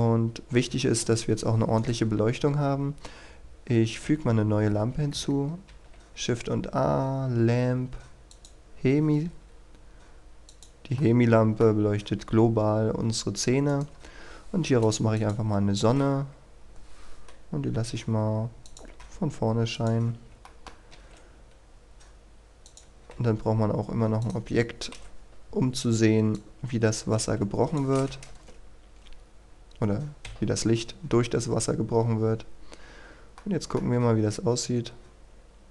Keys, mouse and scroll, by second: 0.1-0.6 scroll down 1, 0.6 KP_1, 1.0-1.8 scroll down 1, 1.8 right click, 8.3 click, 8.8-9.2 scroll down 1, 9.2 a, 10.5 click, 11.0 middle click, 13.2-13.7 scroll up 1, 13.7 right click, 14.8 click, 16.1 KP_7, 16.6-17.7 scroll down 1, 17.7 a, 18.6 click, 20.1 scroll up 1, 20.4 shift+middle click, 22.6 click, 25.0 KP_1, 26.4-28.2 drag, 28.2 KP_0, 29.0-30.2 scroll up 1, 30.2 F12, 32.8-33.4 scroll down 1, 33.4 middle click, 34.1-34.4 scroll up 1.